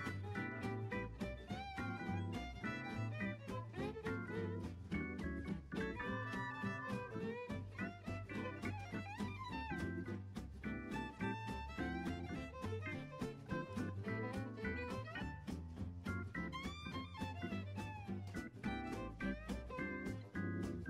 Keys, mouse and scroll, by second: 0.7 click, 1.7-3.4 drag, 3.4 scroll down 2, 4.6-4.9 scroll down 3, 4.9-6.5 middle drag, 6.5-7.0 scroll down 2, 7.0-8.9 shift+middle drag, 8.9 click, 9.2 click, 10.6-12.4 drag, 12.4 0, 15.0 click, 16.1 click.